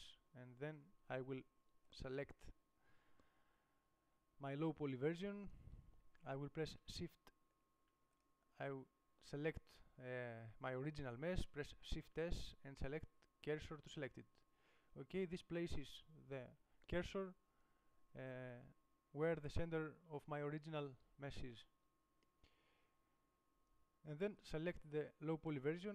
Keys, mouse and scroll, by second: 2.2-3.2 drag, 3.2-13.1 right drag, 14.3 shift+s, 24.8 click.